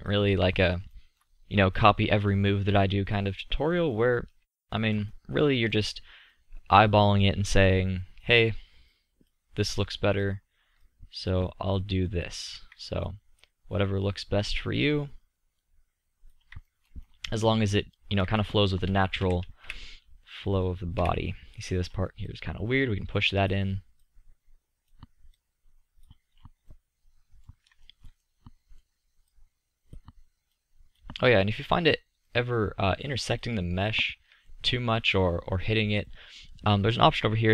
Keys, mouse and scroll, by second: 0.6-1.7 middle drag, 1.9-3.1 middle drag, 3.5 middle click, 6.6-13.2 drag, 16.7-17.3 middle drag, 19.3 KP_7, 19.7 KP_5, 21.0 KP_5, 26.5-26.8 drag, 26.8 middle drag, 32.3 click, 32.7-34.7 middle drag, 34.7 middle click, 35.5 middle click.